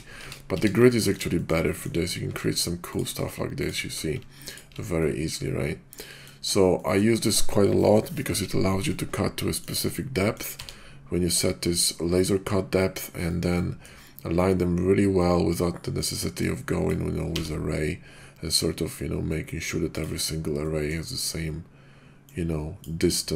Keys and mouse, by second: 0.2 ctrl+z, 0.6 ctrl+z, 0.9 drag, 1.3 shift+click, 1.7 click, 2.2 q, 3.6 shift+click, 4.1 alt+q, 5.0-6.2 middle drag, 6.7 middle drag, 8.8-9.6 middle drag, 10.1-10.4 middle drag, 10.5 d, 12.8 middle drag, 13.2 shift+middle click, 13.6 middle drag, 15.1-15.5 middle drag, 15.9 middle drag, 16.3-16.9 drag, 17.3 v, 19.9 click, 20.6 middle click, 22.3 click.